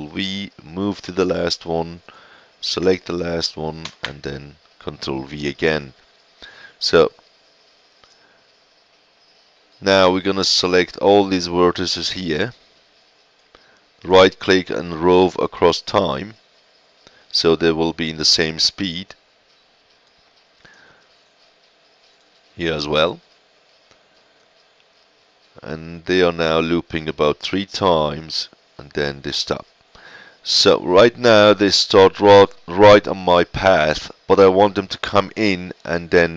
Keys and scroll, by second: 3.8 ctrl+v.